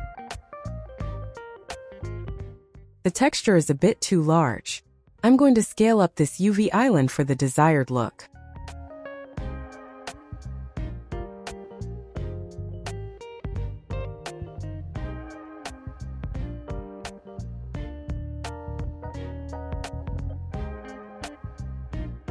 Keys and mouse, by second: 0.0 Tab, 2.5 4, 2.8 click, 4.1 g, 5.3 click, 5.9 s, 7.5 s, 9.6 click, 11.6 Tab, 12.5 middle click, 15.8 click, 17.4 middle click, 18.6 click, 21.1 alt+middle click, 21.8 shift+middle click, 22.0 shift+middle click.